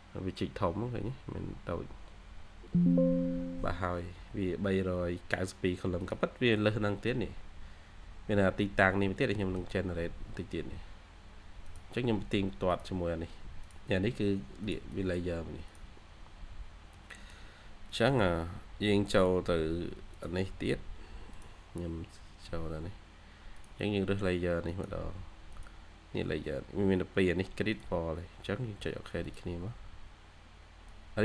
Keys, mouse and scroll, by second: 7.1-7.8 scroll up 1, 9.2 middle click, 13.2 scroll up 1, 14.8 double click, 16.0 scroll down 1, 16.8 middle click, 17.5-18.2 scroll down 2, 17.8 middle click.